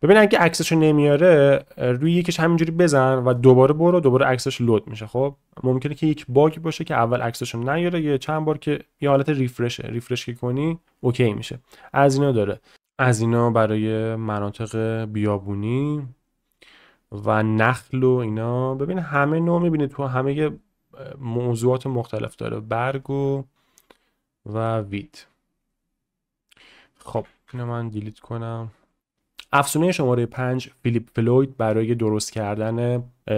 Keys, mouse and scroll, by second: 27.2 a, 28.9 click, 32.1 click.